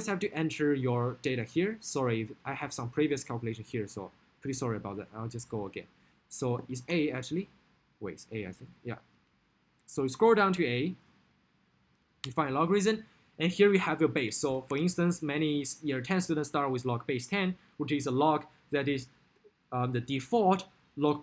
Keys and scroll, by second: 8.5 Down, 8.7 Down, 11.5 Up, 12.4 Return, 14.9 1, 16.4 0, 17.7 Right.